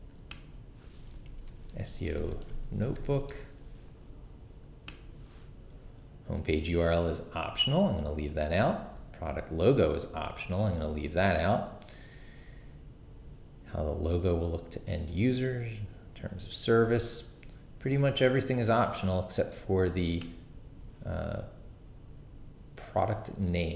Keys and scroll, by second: 1.0-3.8 typing.